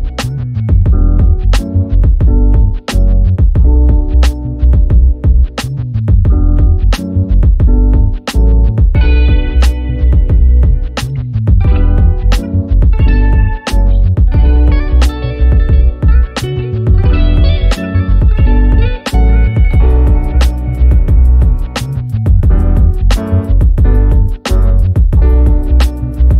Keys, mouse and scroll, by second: 0.8 F2, 1.4 ctrl+scroll up 1, 2.4-3.0 click, 3.2-3.8 ctrl+scroll down 2, 3.8-5.1 ctrl+scroll up 2, 5.1-6.6 drag, 8.2 click, 8.8 ctrl+scroll down 1, 9.1 F1, 9.3 click, 9.8 ctrl+scroll up 1, 10.1 click, 12.0 ctrl+scroll down 1, 12.4 click, 12.9 ctrl+scroll up 1, 13.2 click, 13.7-17.2 shift+drag, 17.2 ctrl+scroll down 1, 17.6 click, 18.0 ctrl+scroll down 1, 18.4 z, 18.9-19.5 click, 19.4 F1, 20.2 ctrl+scroll up 1, 20.7 b, 21.4 click, 22.7 Return, 23.0 F1, 24.0-25.3 click, 25.3 ctrl+scroll down 1, 25.8 ctrl+shift+f.